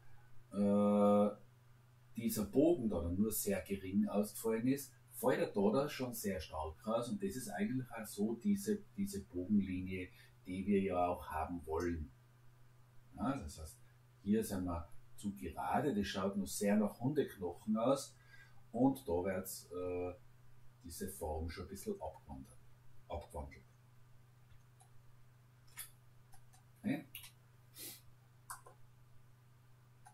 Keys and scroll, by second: 27.2 Delete.